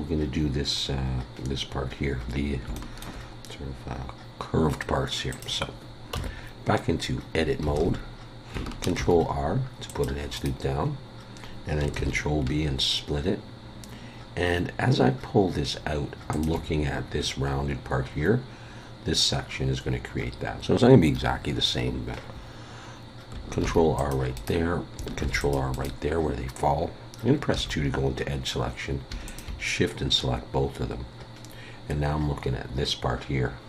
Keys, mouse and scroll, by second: 0.8-1.6 scroll up 1, 2.3-2.6 scroll down 1, 2.7 shift+middle click, 5.3 click, 6.1 Tab, 7.7 alt+a, 9.0 ctrl+r, 10.9-11.3 scroll up 1, 12.0 ctrl+b, 23.6 ctrl+r, 25.2 ctrl+r, 27.5 2, 29.3 shift+click.